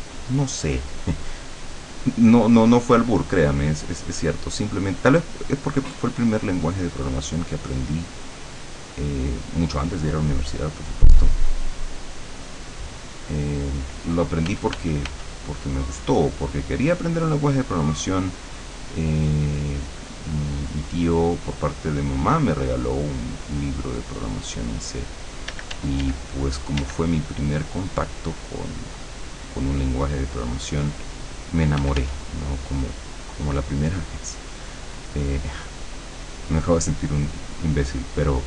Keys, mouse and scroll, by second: 0.9-11.2 drag, 11.6-14.0 drag, 14.6 f, 15.6-25.7 drag, 25.6 d, 25.9-31.9 drag, 26.8 d, 31.8 f, 32.2-38.4 drag.